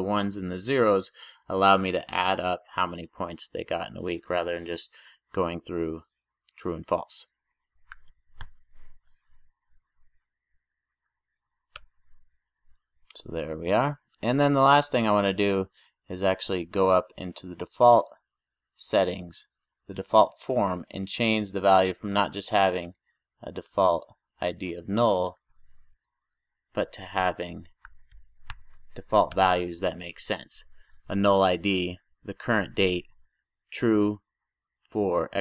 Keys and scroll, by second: 8.5 super+j, 11.7 Return, 13.3 super+s, 28.6 super+j, 29.3 Return, 29.8 super+s.